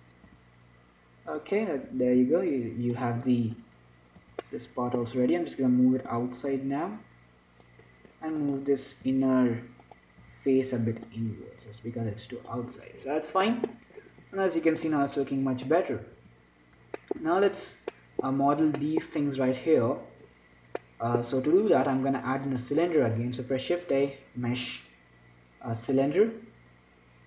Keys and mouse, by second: 0.6 s, 2.2 s, 4.5 z, 5.5-8.2 drag, 8.2-9.3 middle drag, 9.3-11.3 drag, 9.3 z, 10.5 z, 11.3 middle click, 11.8-13.3 drag, 13.5-15.1 middle drag, 16.1 click, 16.5 z, 16.7-20.5 middle drag, 21.1-22.8 middle drag, 22.8-24.4 drag, 23.8 shift+a, 26.8-27.2 middle drag.